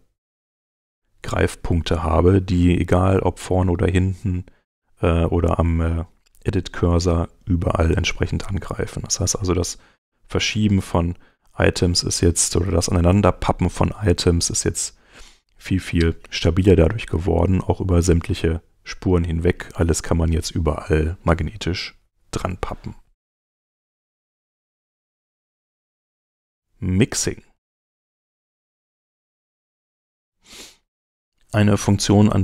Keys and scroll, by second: 22.0 super+Tab.